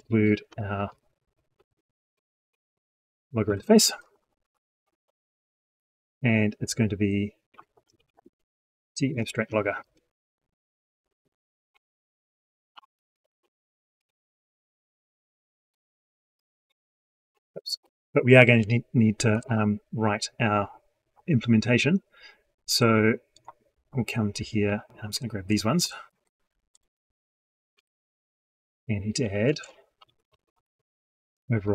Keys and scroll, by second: 8.1 ctrl+space, 25.9 ctrl+c, 27.6 ctrl+v.